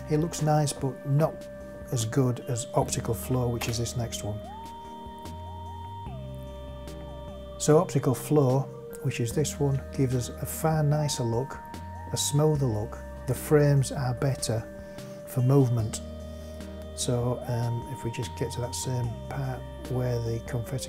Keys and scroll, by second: 3.6 space.